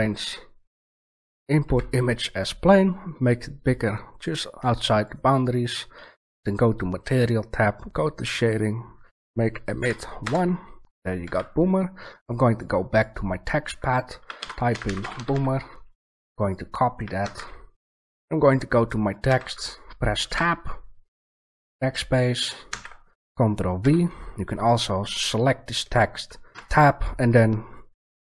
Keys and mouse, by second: 1.6 s, 5.1 click, 5.2-6.3 drag, 8.0 middle click, 8.3-10.1 middle drag, 11.2 a, 18.3 right click, 19.2 Tab, 20.3-21.0 BackSpace, 22.6 ctrl+v, 23.7 Tab, 24.8 right click.